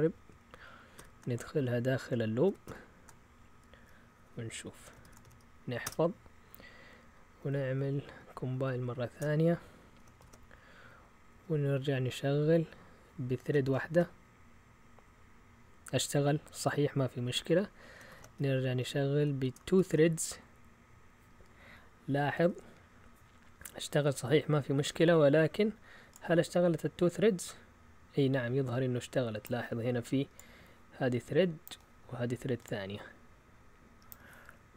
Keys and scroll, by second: 0.9 typing, 2.4 typing, 4.7-5.5 typing, 5.8 Return, 7.4 Up, 7.5-11.3 typing, 11.8 Up, 13.4 BackSpace, 13.6 1, 13.9 Return, 18.1 ctrl+l, 18.6 Up, 19.4 BackSpace, 19.6 2, 19.8 Return.